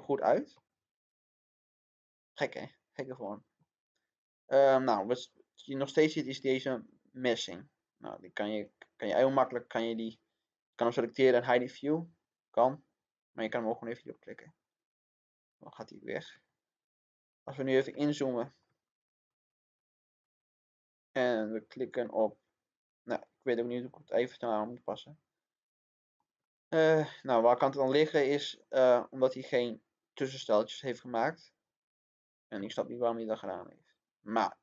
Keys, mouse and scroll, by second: 0.4 scroll down 1, 0.5-3.4 middle drag, 6.1 click, 15.5 middle click, 16.5-16.9 scroll up 1, 17.9-19.4 middle drag, 20.9 click, 21.4 scroll down 1, 21.9 scroll up 1, 22.2-29.4 middle drag, 32.1 scroll down 1, 32.5 middle click, 33.8 scroll down 1.